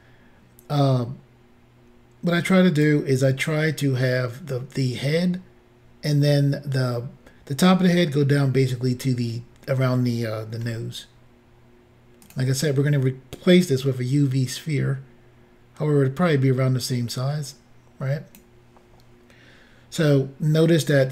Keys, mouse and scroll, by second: 10.7 s, 12.3 click, 13.4 click.